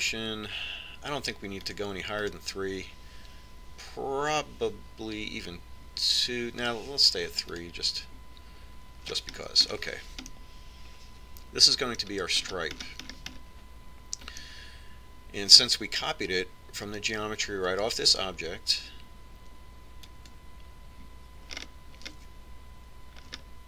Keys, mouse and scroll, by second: 1.7-5.8 drag, 9.4-11.2 drag, 11.2-13.8 middle drag, 14.3-18.0 middle drag, 21.9-23.6 drag, 23.4-23.6 middle drag.